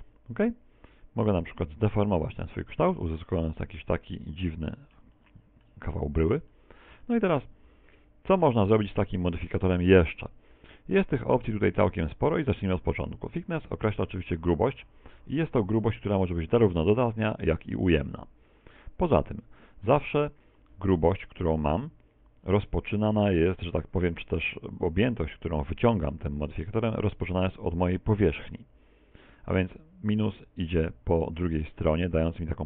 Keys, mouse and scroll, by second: 2.2 Tab, 2.6 z, 3.0 middle click, 5.2 middle click, 6.0 middle click, 6.6 shift+middle click, 7.3 middle click, 9.4 middle click, 13.6 click, 21.5 a, 23.0 middle click, 26.2 middle click, 26.8 middle click, 28.7 middle click.